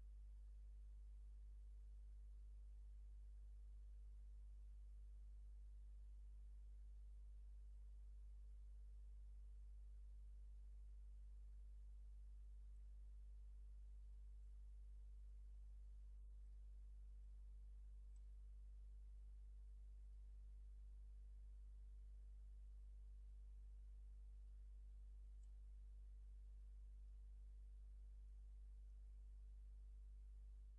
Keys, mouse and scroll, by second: 0.5 click, 4.6 click, 6.1 click, 7.1 click, 12.9 click, 14.5 click, 15.3 click, 16.6 click, 17.4 click, 18.3 click, 20.2 click, 22.8 click, 24.5 click, 25.5 click, 26.7 middle click, 27.6-27.9 ctrl+scroll up 2, 28.4 ctrl+click, 29.4 ctrl+scroll down 1, 30.0 ctrl+scroll down 1.